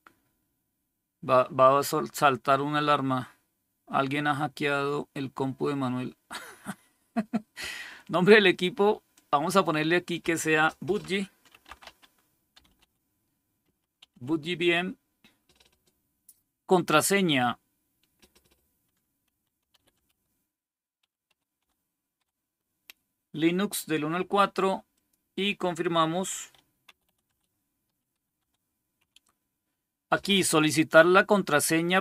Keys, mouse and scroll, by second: 9.0-10.6 drag, 11.2-13.9 typing, 16.8 click, 16.8 typing, 18.9-22.0 typing, 24.8 click, 26.2-28.9 typing.